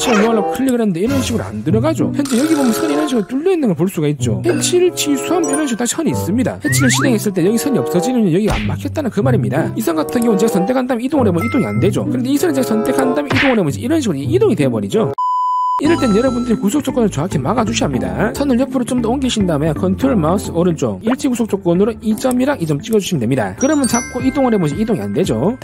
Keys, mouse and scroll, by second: 1.2 click, 2.9 scroll up 1, 3.1 middle click, 11.0-12.1 drag, 18.9 click, 20.6 click, 21.7 click, 22.6 click, 23.3 click, 24.5-25.6 drag.